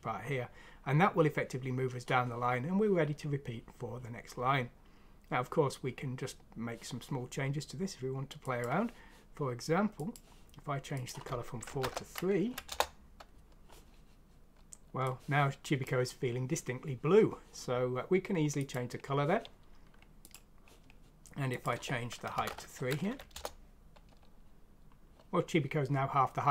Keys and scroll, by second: 11.7 typing, 12.3 F6, 12.7 Return, 22.3 typing, 23.1 F6, 23.3 Return.